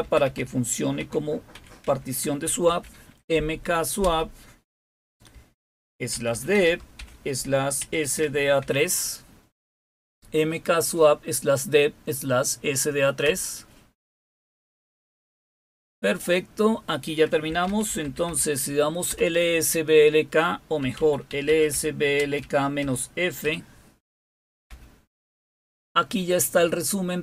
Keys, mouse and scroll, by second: 0.0-2.6 typing, 4.0 typing, 5.6-8.6 typing, 13.2 Return, 17.2-18.7 typing, 19.1 Return, 20.5-23.4 typing, 24.6 typing.